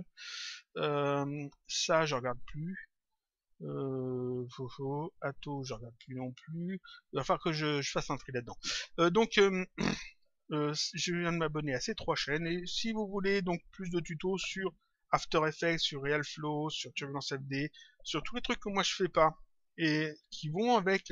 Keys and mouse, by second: 10.8 click.